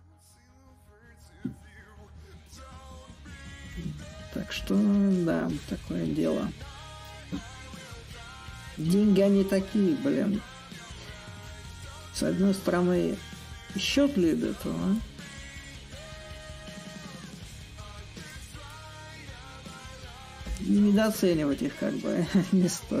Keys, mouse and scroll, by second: 0.2-5.2 drag, 5.4-6.7 drag, 7.0-8.9 shift+drag, 9.0-11.2 shift+drag, 19.1-23.0 drag.